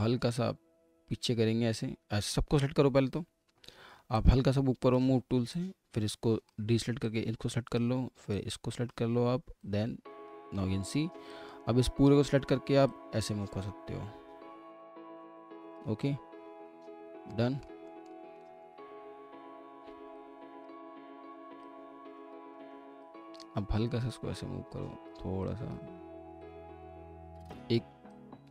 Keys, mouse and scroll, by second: 16.6 scroll up 1, 17.3 middle click, 19.5-20.0 scroll down 1, 20.1 alt+click, 22.6 ctrl+z.